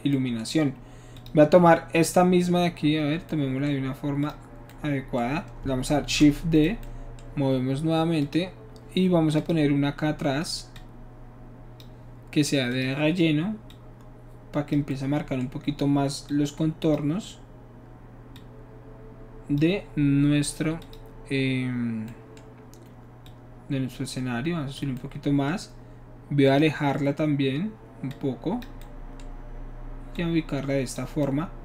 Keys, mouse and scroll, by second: 0.1 middle click, 1.2 click, 2.0 click, 4.2 click, 6.0 shift+d, 8.2 click, 9.4 click, 10.8-11.8 drag, 12.7 click, 13.7-14.8 drag, 14.9 middle click, 16.3 click, 18.4-19.6 drag, 20.8 click, 23.2-24.8 drag, 26.5 click, 28.1 click, 30.1 click.